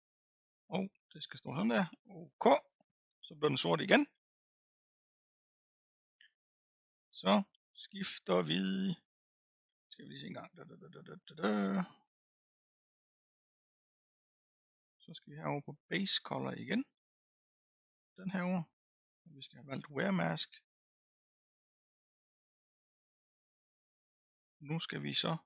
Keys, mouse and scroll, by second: 18.2-21.3 drag.